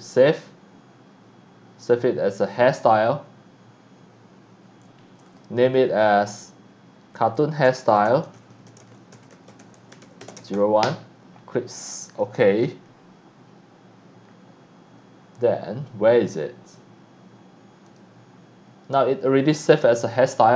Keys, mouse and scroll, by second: 5.3 click, 5.6 click, 7.1 click, 7.4-11.3 typing, 12.0 click, 12.6 click, 17.9 click, 19.5 click.